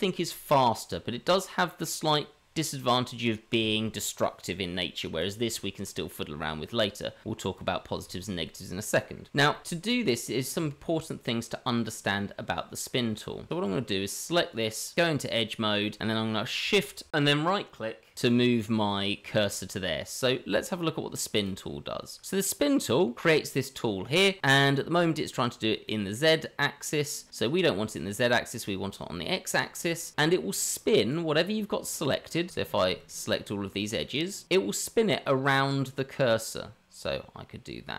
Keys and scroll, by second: 14.4 Tab.